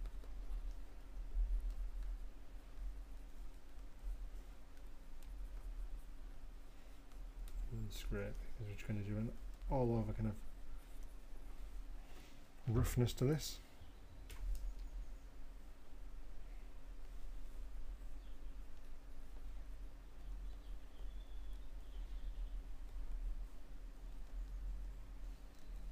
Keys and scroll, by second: 15.9 [, 16.6 [, 18.2 [, 23.2 l.